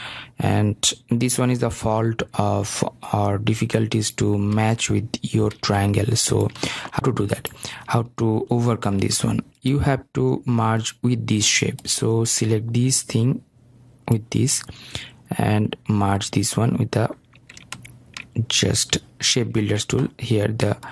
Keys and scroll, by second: 5.2 ctrl+z.